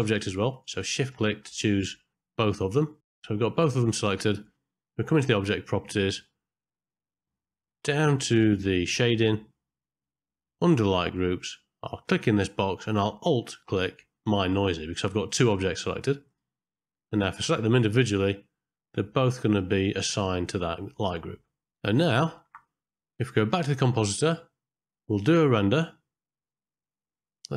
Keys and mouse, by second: 0.5 shift+click, 1.3 ctrl+middle click, 1.8 shift+middle click, 2.2 middle click, 2.5 shift+middle click, 2.7 KP_Decimal, 3.0 ctrl+middle click, 3.2 middle click, 3.7 ctrl+middle click, 6.2-8.0 middle drag, 8.8 middle click, 9.5 middle click, 12.2-16.4 drag, 19.5 click, 22.4 KP_0, 26.8 middle click.